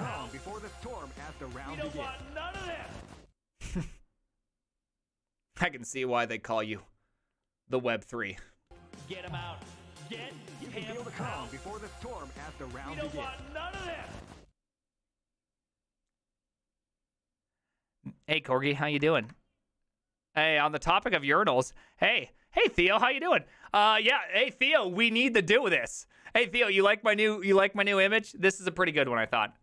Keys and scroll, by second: 19.2 alt+f.